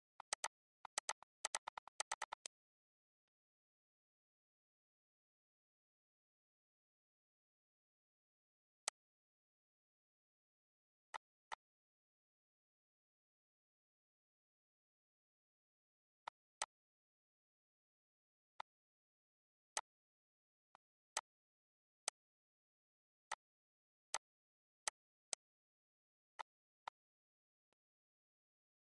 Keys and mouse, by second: 0.1 click, 3.2 click, 5.4 8, 5.8 Return, 8.8 click, 9.4 shift+6, 9.5 Return, 11.2 click, 16.2 click, 18.5 click, 19.7 click, 20.7 click, 22.0 click, 23.2 click, 24.1 click, 24.8 click, 26.3 click, 27.7 click.